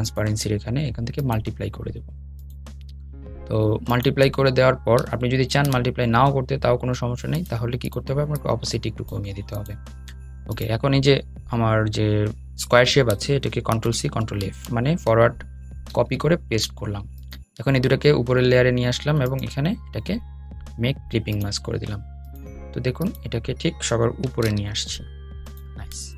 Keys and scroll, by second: 4.5 super+z, 5.8 super+z, 12.7 super+c, 13.1 super+f, 14.4 super+f, 14.9 super+}, 16.2 super+}, 24.8 super+}.